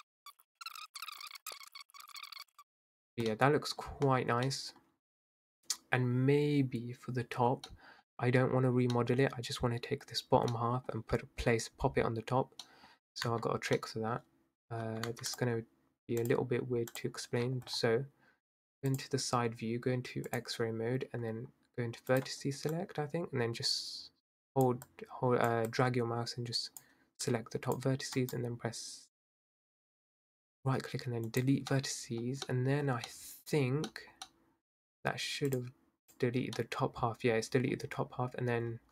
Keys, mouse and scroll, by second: 0.4 ctrl+z, 0.5 click, 0.8 middle click, 0.9 ctrl+z, 1.0 scroll up 1, 1.2 ctrl+z, 1.2 middle click, 1.4 Tab, 1.5 click, 1.7 ctrl+z, 2.0 click, 2.5-3.0 middle drag, 3.0 scroll down 2, 3.3-4.9 middle drag, 4.9-7.7 scroll down 1, 7.7-12.9 middle drag, 12.9-13.3 scroll up 2, 13.3 Tab, 13.4-13.8 scroll down 3, 13.8-14.8 middle drag, 14.8 Tab, 15.1 Tab, 15.3 click, 16.2-17.4 drag, 17.4-17.9 scroll down 12, 18.9 click, 20.3-22.8 drag, 24.8 click, 25.7 click, 27.2 click, 28.3-32.2 right drag, 32.2-32.8 scroll down 2, 32.8-33.9 scroll up 4, 33.9 scroll up 1, 34.1 middle click, 34.2 scroll down 1, 34.3-35.5 middle drag, 35.5 click, 36.1 click, 36.6-38.7 middle drag, 38.7 scroll down 5.